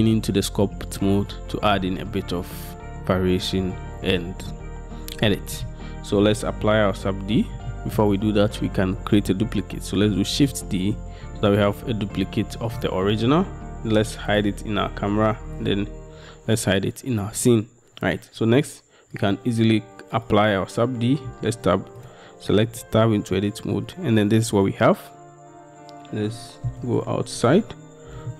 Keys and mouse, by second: 7.9 shift+drag, 10.5 shift+d, 22.8 Tab.